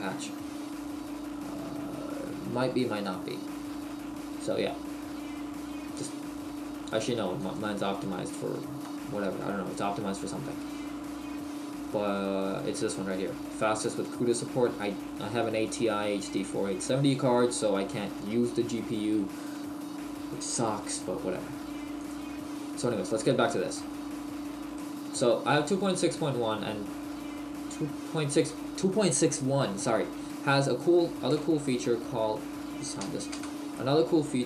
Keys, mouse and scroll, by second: 23.3 middle click, 29.7-30.2 scroll up 1, 30.2-30.5 scroll down 1, 31.3 space, 33.0 h.